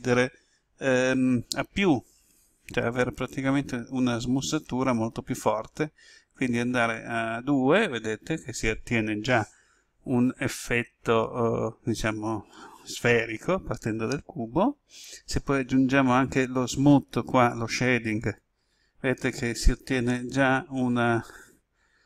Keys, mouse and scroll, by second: 20.0-22.0 middle drag.